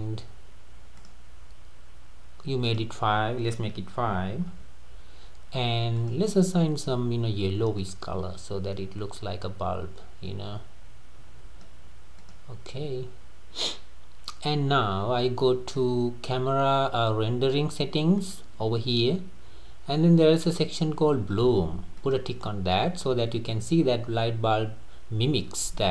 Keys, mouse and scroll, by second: 0.0-0.3 scroll up 1, 1.0 click, 2.7-5.7 drag, 6.0 click, 12.2 click, 18.2 click, 22.0 click.